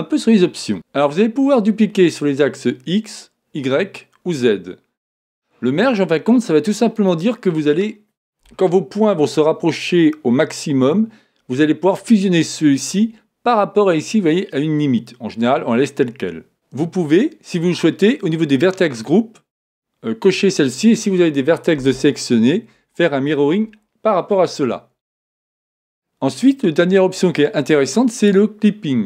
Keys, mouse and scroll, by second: 5.9-8.9 drag.